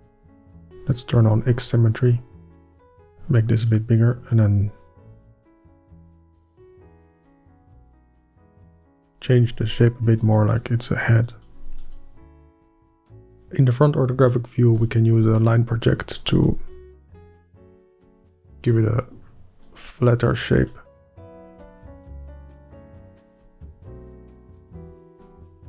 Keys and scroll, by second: 2.8 f, 5.9 f, 13.2-14.8 space, 16.6-17.3 space, 24.0 f, 24.3 space, 24.6 space.